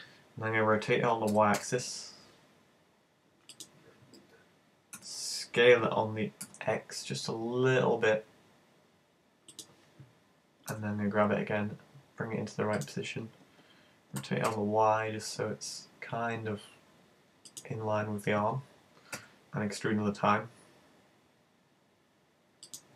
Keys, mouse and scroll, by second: 1.3 r, 3.6 click, 5.0 s, 9.6 click, 10.8 g, 12.9 click, 14.2 r, 17.6 click, 19.2 e, 22.8 click.